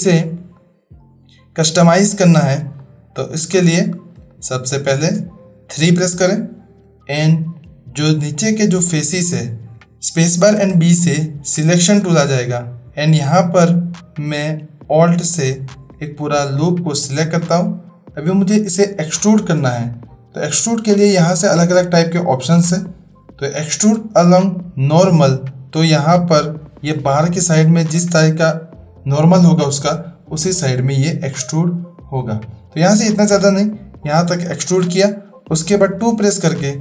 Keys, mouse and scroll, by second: 0.5-1.8 middle drag, 2.2 middle click, 2.3 click, 2.8-3.4 shift+drag, 2.8-3.4 shift+middle drag, 4.3 shift+click, 4.3 shift+middle click, 5.7 3, 10.3 space, 15.5 alt+click, 18.8 click, 20.0-23.9 drag, 25.4-34.6 drag, 36.1 2, 36.6 click.